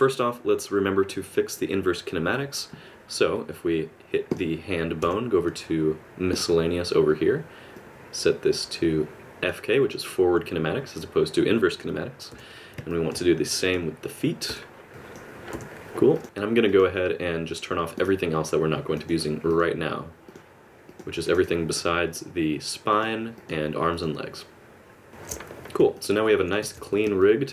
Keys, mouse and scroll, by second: 4.3 click, 5.0 n, 6.3 click, 7.7 click, 12.3 n, 12.9 middle click, 13.6 click, 14.5 n, 14.9 click, 15.2 click, 15.5 n, 16.1 click, 16.2-25.3 shift+click, 25.9 middle click, 26.6 alt+a, 27.2 middle click.